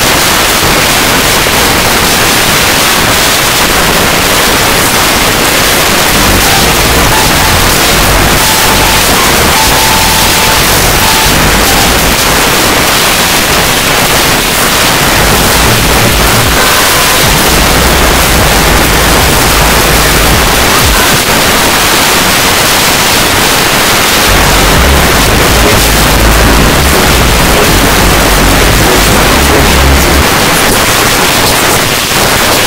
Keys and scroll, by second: 12.1 Page_Down, 21.1 Page_Down, 30.2 Page_Down.